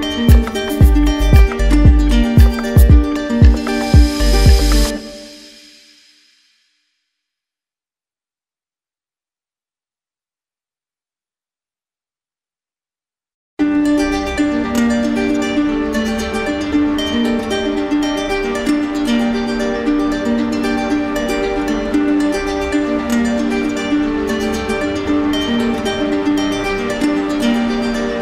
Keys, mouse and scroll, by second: 1.1 click, 5.6 click, 17.0 click, 17.4 alt+click, 19.3 alt+click, 19.8 alt+click, 24.2 ctrl+click, 25.2 ctrl+click, 25.4 click, 27.1 click.